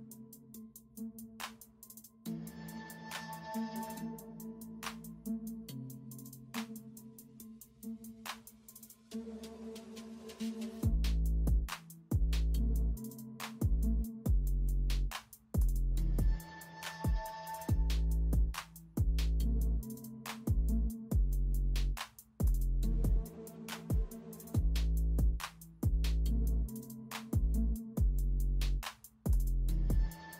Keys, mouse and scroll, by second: 2.5 ctrl+space, 3.5-4.9 typing, 5.8 ctrl+space, 6.7 r, 8.6 typing, 10.1-11.3 typing, 13.2 [, 14.3 [, 15.0 [, 15.3 ], 16.8-17.6 typing, 22.0 ], 24.2 [, 24.8 [, 26.6 space, 30.0-30.3 typing.